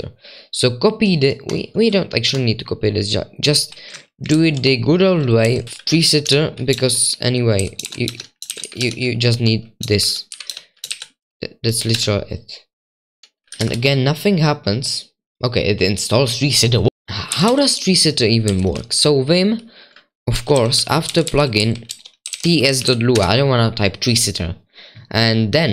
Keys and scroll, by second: 4.3 ctrl+c, 4.3 super+2, 5.2-9.4 typing, 6.3 Return, 7.8 ctrl+v, 8.1 Escape, 10.5 Escape, 10.5-13.6 typing, 16.8 Return, 16.8 typing, 17.3 ctrl+w, 17.4 ctrl+w, 18.2-21.5 typing, 22.9-23.6 typing.